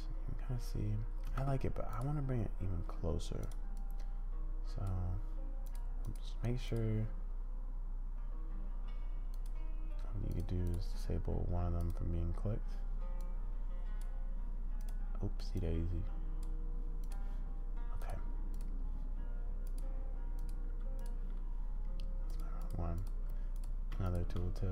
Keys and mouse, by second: 1.3 space, 1.9 click, 3.5 click, 3.7-5.0 drag, 6.1 click, 6.7 click, 9.4-10.6 drag, 11.8 click, 13.3 click, 14.8 click, 15.5 click, 17.1 click, 18.0 click, 18.5 click, 21.0 shift+click, 22.7 click, 24.0 shift+click.